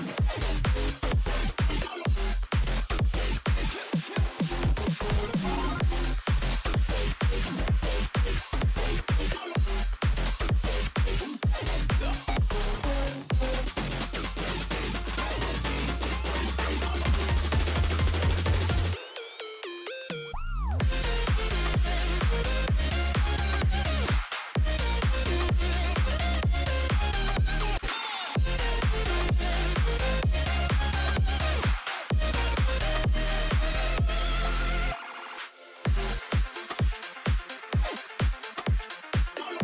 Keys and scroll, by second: 34.8-35.8 typing, 37.5 Return.